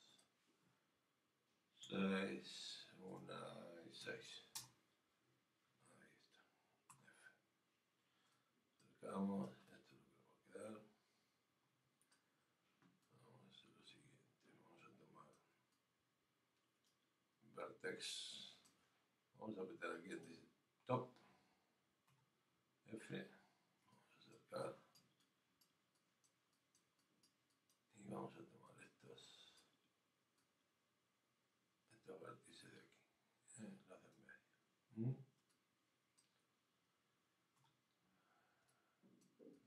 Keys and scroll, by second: 2.7 Tab, 7.0 Return.